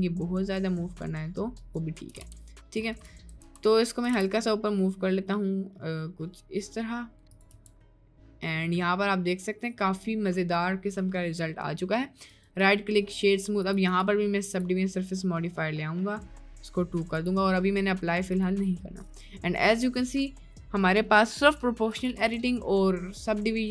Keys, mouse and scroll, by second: 2.2 g, 3.1 Tab, 3.4 Tab, 4.1 g, 7.5 Tab, 7.9 middle click, 9.3-10.4 middle drag, 11.2 middle click, 11.9 middle click, 12.3-13.1 right drag, 13.7-15.0 drag, 15.5 middle click, 17.2 click, 18.5 click, 18.9-19.5 middle drag, 19.9 middle click, 22.2 Tab, 22.6 middle click.